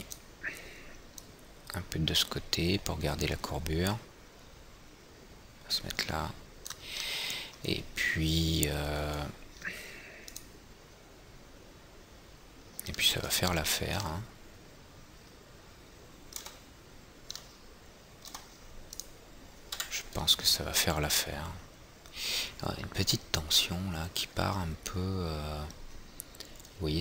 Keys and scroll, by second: 20.3 F4.